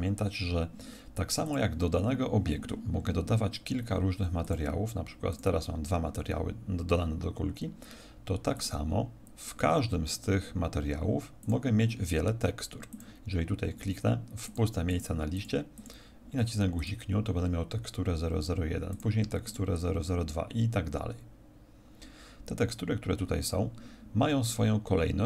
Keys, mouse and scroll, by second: 1.4 click, 4.4 click, 5.3 click, 8.5 click, 11.3 click, 12.9-18.6 click, 18.9 click, 19.4 click.